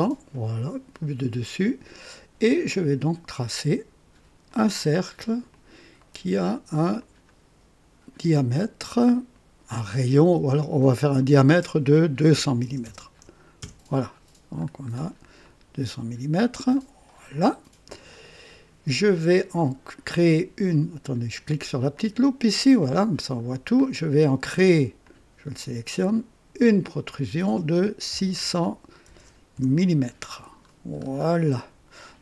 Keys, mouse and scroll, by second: 2.5 click, 4.5 click, 5.5 click, 6.0 right click, 7.0 click, 10.6 click, 12.3 KP_2, 12.6 KP_0, 13.6 Return, 14.5-15.2 scroll down 2, 15.4 right click, 16.2 typing, 16.8-17.5 drag, 18.1 click, 18.8 typing, 21.9 click, 23.5 scroll down 2, 25.0 click, 26.8 click, 28.1 KP_6, 28.4 KP_0, 29.0 KP_0, 29.5 KP_Enter, 30.6-31.3 scroll down 4, 31.6 right click.